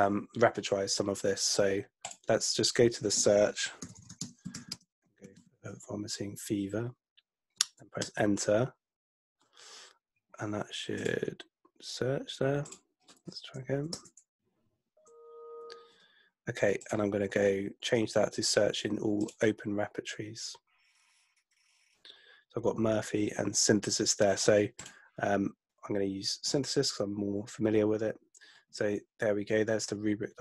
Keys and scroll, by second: 3.6-6.1 typing, 8.0 Return, 14.0 Return.